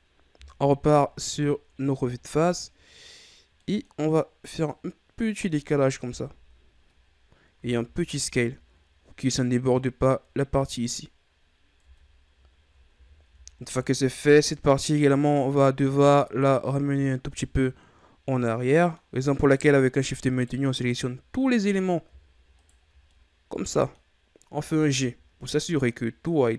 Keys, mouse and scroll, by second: 0.5 KP_1, 2.0-2.4 ctrl+scroll up 4, 2.4-4.6 middle drag, 4.6-6.0 drag, 6.0 KP_1, 7.5 s, 11.2 scroll down 4, 11.8 Tab, 12.4 ctrl+scroll down 3, 12.9 a, 13.5-15.2 ctrl+scroll up 4, 15.2 right click, 16.2 shift+right click, 16.7-17.3 scroll down 5, 17.4-19.3 middle drag, 19.3 right click, 20.2 shift+right click, 20.7-22.5 middle drag, 22.5-23.1 shift+right drag, 23.1-24.7 middle drag, 24.7 g.